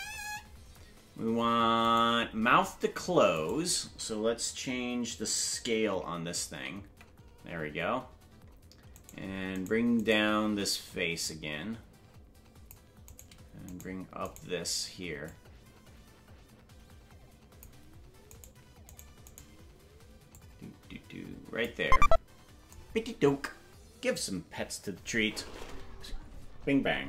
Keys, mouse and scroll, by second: 0.0-1.9 scroll up 5, 2.0 right click, 3.5 right click, 6.5 alt+s, 9.1 right click, 9.7 shift+right click, 10.2 right click, 11.2-12.7 drag, 13.2 right click, 13.8 shift+right click, 15.0 shift+right click, 15.2-17.6 drag, 18.5 right click, 19.0 shift+right click, 19.4 shift+right click, 20.3-21.6 drag.